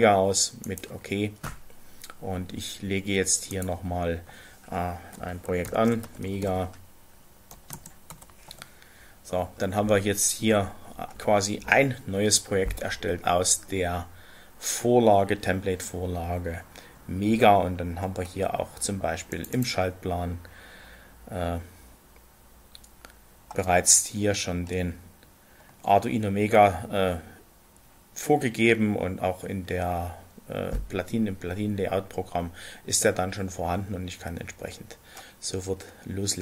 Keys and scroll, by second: 5.6-6.3 typing, 7.5-8.2 typing, 8.4 Return.